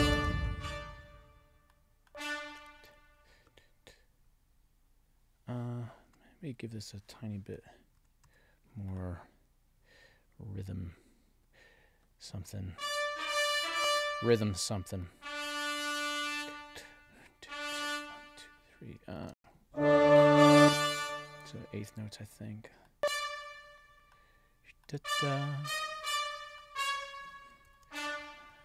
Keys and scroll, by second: 0.1 space, 19.2 space, 20.7 space, 27.6 alt+Up.